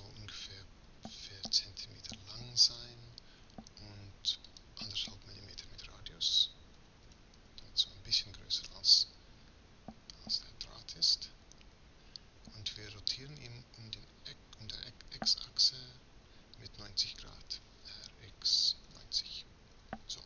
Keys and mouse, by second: 7.6 m, 11.2-17.5 middle drag, 17.8 r.